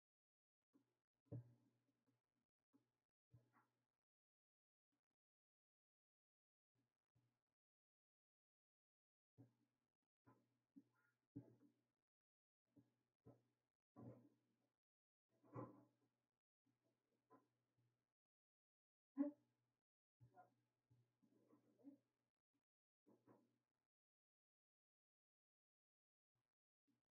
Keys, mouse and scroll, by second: 0.0 click, 4.9-20.1 drag, 21.8 Tab.